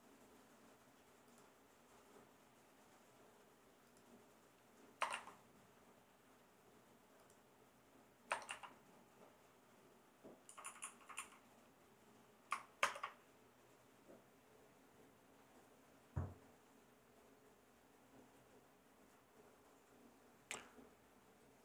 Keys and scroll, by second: 5.0 BackSpace, 5.1 x, 8.3 BackSpace, 8.5 x, 10.5 Right, 11.1 Right, 12.8 shift+Return.